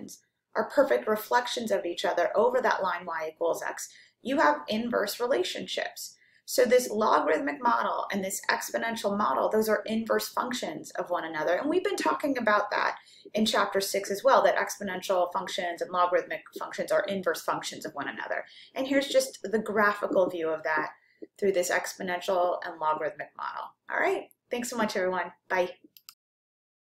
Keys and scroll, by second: 25.9 x.